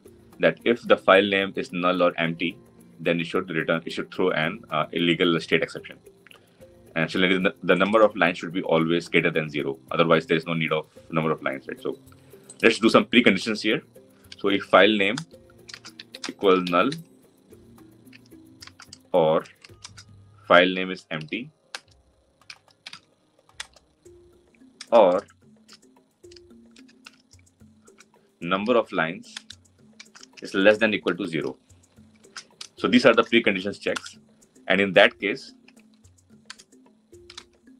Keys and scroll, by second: 15.0 Return, 21.5 Return, 29.1 Return.